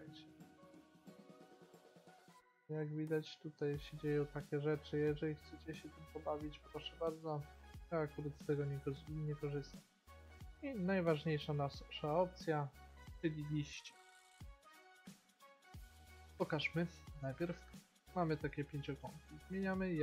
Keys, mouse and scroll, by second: 1.1-3.0 drag, 6.8-11.4 drag, 14.1-16.6 middle drag, 16.6-18.1 drag, 18.1 middle click.